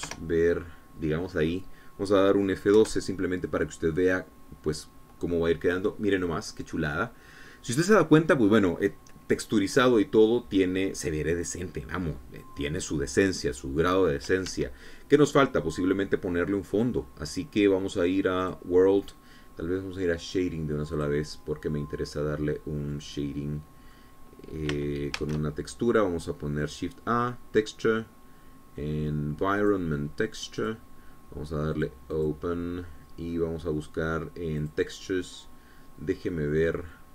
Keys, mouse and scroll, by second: 0.3 shift+middle click, 1.1 KP_0, 3.9 F12, 11.3-15.6 scroll down 2, 15.6 Escape, 19.5 click, 22.0 click, 24.0-25.2 middle drag, 26.2 shift+a, 30.7 click, 31.7 click, 32.8 click, 33.2 click, 35.7 click.